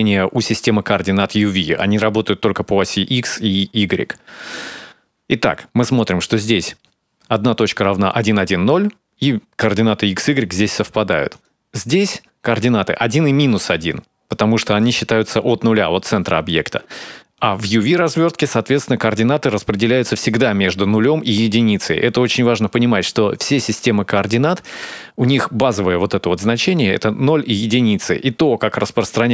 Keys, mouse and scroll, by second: 7.2 right click, 12.3 right click.